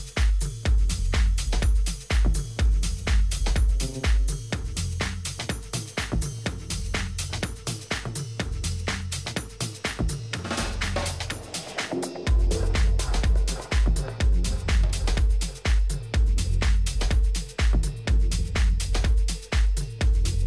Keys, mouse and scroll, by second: 0.5 middle click, 1.1-4.9 middle drag, 6.7-8.2 middle drag, 8.2-9.9 right drag, 8.8-9.8 drag, 9.9 middle click, 14.7-16.7 drag, 17.7-18.7 middle drag, 18.8-20.4 middle drag.